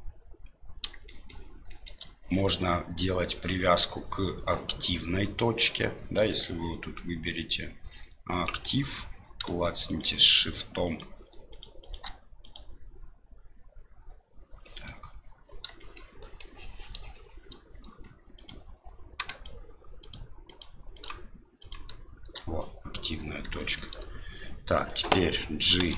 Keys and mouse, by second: 1.0 shift+middle click, 1.7 shift+middle click, 6.2-8.6 drag, 9.8 shift+right click, 10.8 shift+right click, 11.8 shift+right click, 12.4 right click, 14.8 click, 15.8 shift+middle click, 16.2 shift+click, 18.3 shift+right click, 19.2 shift+right click, 20.0 shift+right click, 20.4 shift+right click, 20.9 shift+right click, 21.6 shift+right click, 23.5 shift+middle click, 25.7 g.